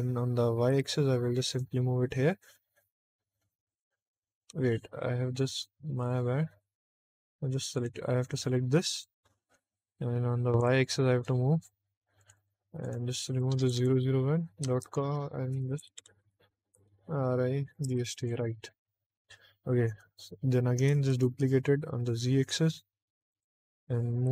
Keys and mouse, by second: 0.6 y, 1.4 click, 1.7 middle click, 4.4 ctrl+z, 5.6 ctrl+z, 7.7 click, 8.3 middle click, 8.8 shift+d, 9.3 x, 10.5 y, 11.1 click, 12.1 click, 12.3-18.2 drag, 13.5 BackSpace, 13.8 BackSpace, 14.7 Left, 15.1 Left, 15.7 BackSpace, 16.1 BackSpace, 20.8 shift+d, 21.2 z, 23.2 click, 24.0 g.